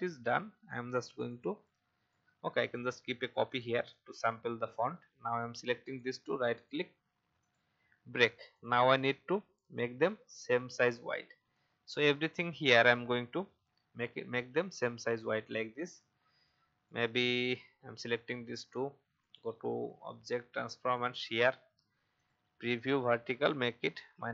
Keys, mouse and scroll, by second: 1.1 shift+click, 2.1 alt+click, 5.8 right click, 6.5 click, 9.7 shift+click, 11.5 shift+click, 13.4 shift+Down, 13.5 shift+Down, 13.9 shift+Down, 14.1 shift+Down, 15.7-22.0 drag, 23.7-24.0 shift+scroll up 1.